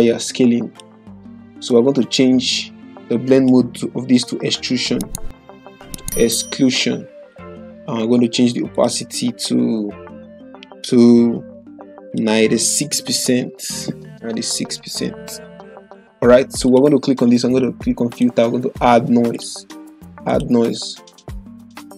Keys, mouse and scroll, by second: 7.2 click, 12.5 click, 13.0-14.5 typing, 15.8 click.